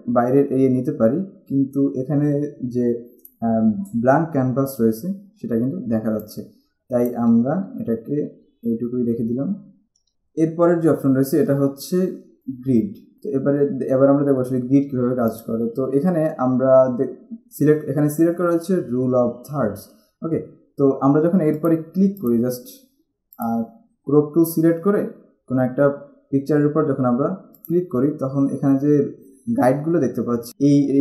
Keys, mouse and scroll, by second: 3.8-4.9 scroll down 1, 5.5-6.2 scroll down 1, 6.2 click, 7.7-9.2 typing, 12.4 click, 13.2 click, 15.4 click, 21.8 click, 23.6 click, 27.9 click.